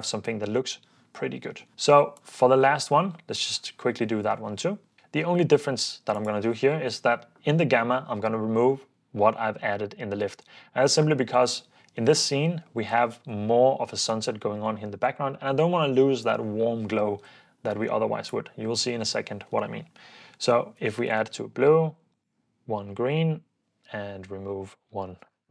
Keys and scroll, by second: 20.7-21.6 typing, 22.7-23.6 typing, 25.0-25.5 typing.